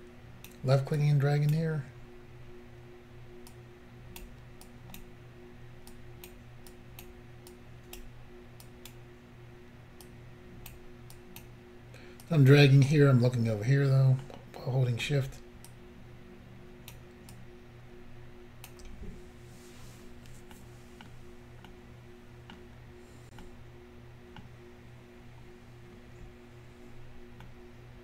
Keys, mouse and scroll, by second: 0.0 shift+click, 1.0 shift+click, 3.5 shift+click, 4.7 shift+click, 6.0 shift+click, 6.7 shift+click, 7.5 shift+click, 8.7 shift+click, 10.1 shift+click, 11.2 shift+click, 12.3 shift+click, 14.3 middle click, 15.7 shift+click, 20.6 middle click, 21.7 middle click, 22.9 scroll down 3, 23.5 middle click, 27.4 middle click.